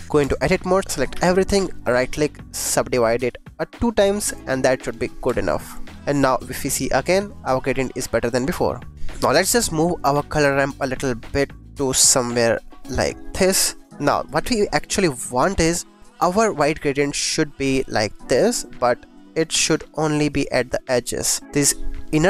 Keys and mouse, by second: 0.1 Tab, 1.1 a, 1.7 click, 3.1 click, 5.2 Tab, 6.6 click, 8.9-11.1 drag, 11.4 click, 12.3 click, 13.1 click, 13.9 click, 14.2 shift+click, 15.0 click, 15.4 shift+click, 16.0 click, 16.9 click.